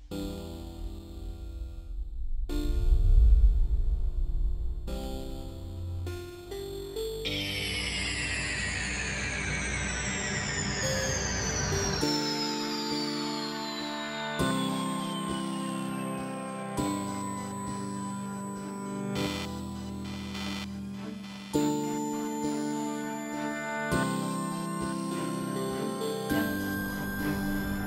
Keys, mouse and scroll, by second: 0.2 s, 0.6 click, 1.0 scroll down 4, 1.1 shift+middle click, 1.4 r, 2.1 middle click, 2.3 KP_0, 2.5 middle click, 2.9 r, 3.5 KP_0, 4.0 click, 4.8 click, 5.0 scroll down 2, 5.1 shift+middle click, 5.2-5.7 scroll up 2, 5.4 click, 5.9 r, 6.8 middle click, 7.0 shift+middle click, 7.2 click, 7.6 scroll down 2, 7.7 middle click, 7.9 s, 10.5 click, 11.3 scroll up 2, 11.4 scroll down 4, 11.5 shift+middle click, 11.7 middle click, 11.8 shift+middle click, 12.5 ctrl+space, 12.8 shift+middle click, 12.9 scroll up 1, 13.0 alt+z, 13.1 middle click, 13.7 z, 13.8 Tab, 14.0 scroll up 2, 14.3 middle click, 17.1 alt+a, 17.2 scroll down 4, 17.3 ctrl+space, 17.3-18.2 scroll up 8, 17.5 alt+z, 17.6 middle click, 18.0 click, 18.2 s, 19.3 scroll down 3, 19.5 middle click, 19.5 click, 19.8 s, 20.4 click, 21.4 click, 22.0 alt+a, 22.2 shift+middle click, 22.2 scroll down 10, 22.3-22.7 scroll up 6, 22.4 middle click, 22.7 click, 22.8 scroll down 1, 23.0 middle click, 23.0 s, 23.3 click, 23.7 scroll down 1, 23.8 middle click, 24.0 click, 24.6 r, 25.5 click, 25.9 click, 26.1 s, 27.5 click.